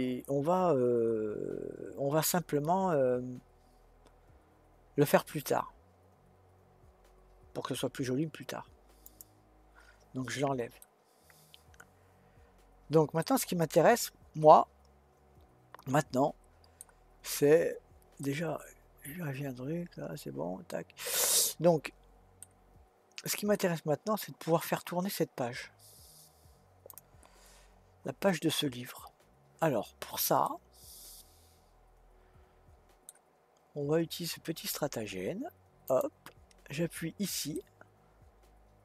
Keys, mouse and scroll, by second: 9.0-10.8 drag, 10.8-16.7 middle drag, 17.3-18.2 scroll up 2, 18.2-21.4 middle drag, 22.4-23.0 scroll down 1, 23.0-23.5 scroll down 2, 23.5-26.7 middle drag, 26.9 click, 30.4-33.5 middle drag, 33.5-35.8 scroll up 4, 35.8 click, 36.9-37.5 scroll down 2, 37.5-38.8 middle drag.